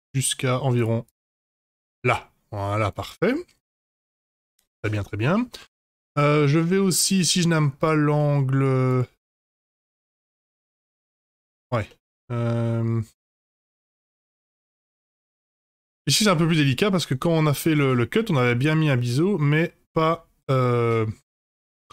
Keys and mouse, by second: 1.0 click, 1.4 Tab, 1.7-2.9 middle drag, 4.1-5.2 middle drag, 6.5-6.9 shift+middle drag, 7.1 middle click, 8.1-8.5 middle drag, 8.8 click, 9.3-10.3 middle drag, 10.8 Tab, 11.5 Tab, 11.6 click, 11.8-13.2 middle drag, 13.5-14.5 middle drag, 15.0-15.3 middle drag, 15.5 Tab, 16.4 Tab, 16.4-16.9 middle drag, 18.1-18.6 middle drag, 18.9-21.9 middle drag.